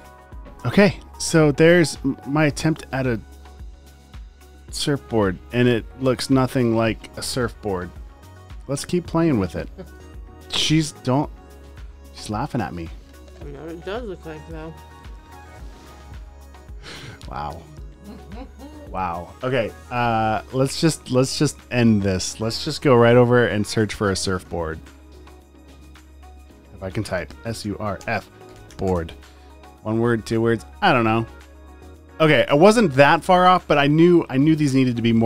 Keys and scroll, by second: 7.8 a, 22.9 super+n, 24.0-29.4 typing, 25.1 super+a, 26.6 super+a.